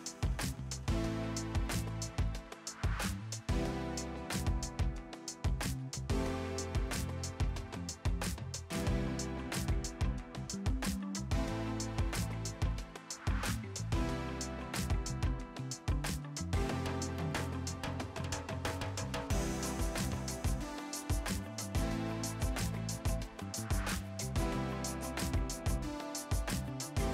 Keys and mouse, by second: 2.4 Escape, 2.5 click, 2.9 ctrl+shift+x, 3.0 click, 17.5 click, 17.7 ctrl+1, 19.8 click, 22.4 right click, 22.9 click, 23.9 v, 24.0 click, 26.3 click.